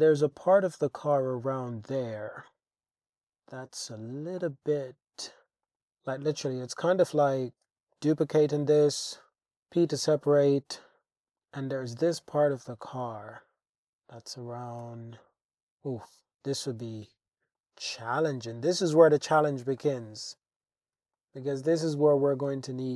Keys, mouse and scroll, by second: 2.0 click, 2.4 Tab, 3.7 click, 5.1 alt+z, 5.7 shift+click, 6.8 shift+click, 7.7 shift+d, 8.7 click, 9.5 p, 9.8 Tab, 10.3 click, 11.2 click, 12.3 e, 12.7 x, 14.8 Tab, 17.0-17.6 drag, 19.1 click, 19.8 shift+drag, 21.2 shift+click, 22.5 Tab.